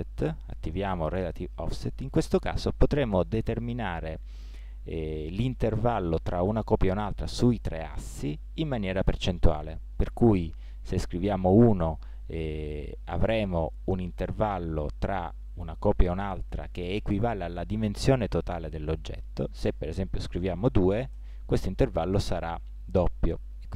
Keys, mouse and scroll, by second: 0.9 middle click, 2.6-5.1 middle drag, 11.4-13.6 middle drag, 19.7-23.7 drag.